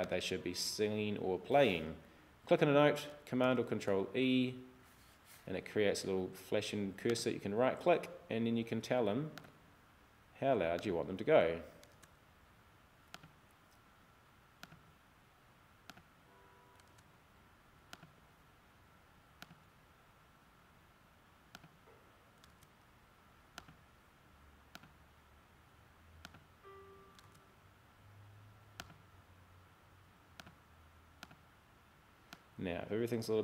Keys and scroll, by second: 3.5 super+e, 12.0 super+e, 16.9 super+e, 22.6 super+e, 27.3 super+e.